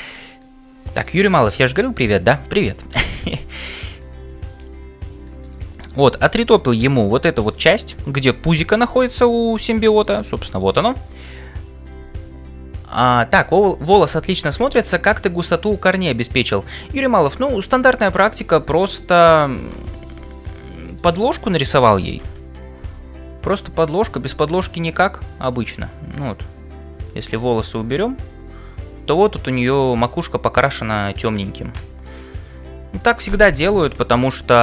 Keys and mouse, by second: 20.1 Tab, 22.7 g.